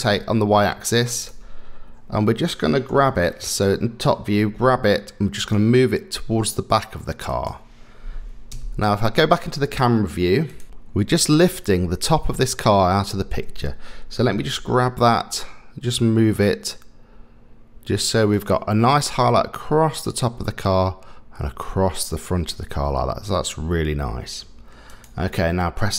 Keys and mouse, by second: 2.9 KP_7, 4.5 g, 8.5 KP_0, 14.6 g, 24.9 click.